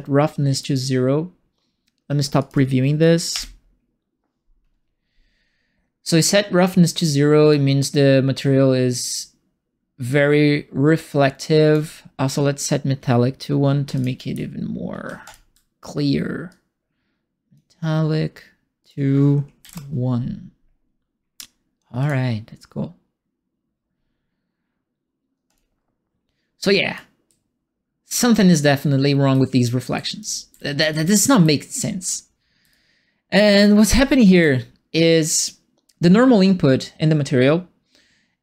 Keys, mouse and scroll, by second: 2.3 click, 3.3 p, 7.5-11.7 drag, 13.8 m, 13.9 click, 15.0 1, 15.2 click, 16.4-17.5 drag, 18.8 click, 19.6 KP_1, 22.0 click, 25.5 click, 26.9-32.7 right drag, 27.2 a, 29.6-31.7 typing, 34.3 click.